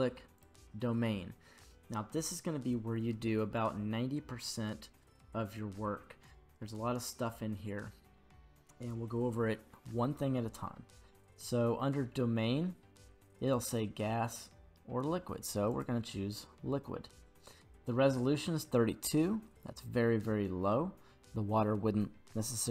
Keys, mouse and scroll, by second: 5.7-6.0 scroll down 7, 6.8-8.2 scroll up 3, 13.5-15.9 drag.